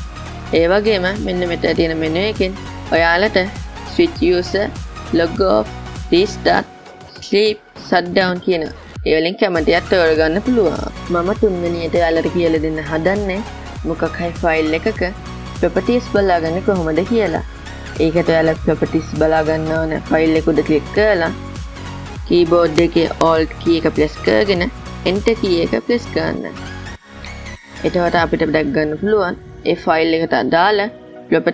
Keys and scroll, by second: 26.8 alt+Return.